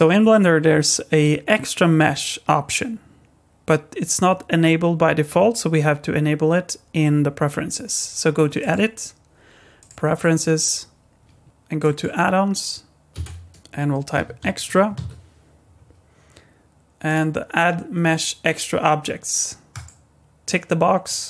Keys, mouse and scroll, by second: 8.6 click, 11.4 click.